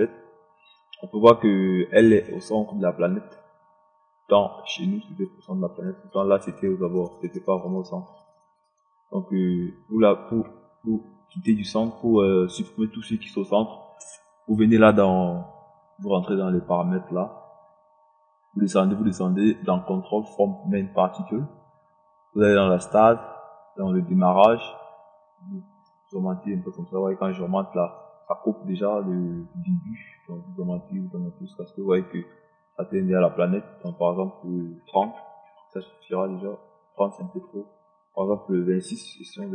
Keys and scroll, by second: 34.9 KP_3, 35.2 KP_0, 39.0 KP_2, 39.3 6.